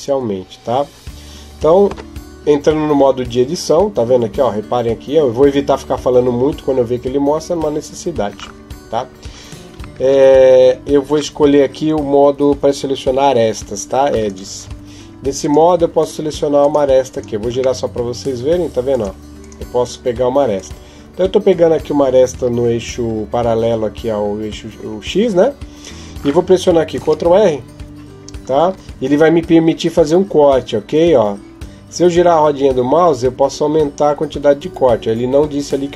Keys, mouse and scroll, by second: 1.7 Tab, 9.8 ctrl+Tab, 15.2 right click, 15.8 right click, 17.6 middle click, 18.7 right click, 19.2 right click, 20.4 right click, 22.8 KP_7, 26.8 ctrl+r.